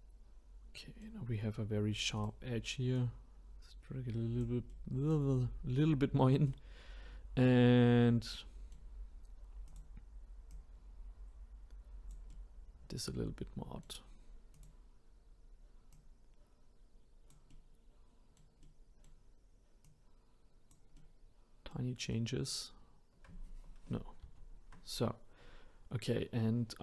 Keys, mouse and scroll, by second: 2.2-3.3 drag, 4.7-9.7 middle drag, 9.7 click, 10.5 click, 12.3-14.5 middle drag, 14.5-16.0 drag, 17.5-19.8 middle drag, 19.8-20.9 drag, 20.9-24.2 middle drag, 24.2 ctrl+z.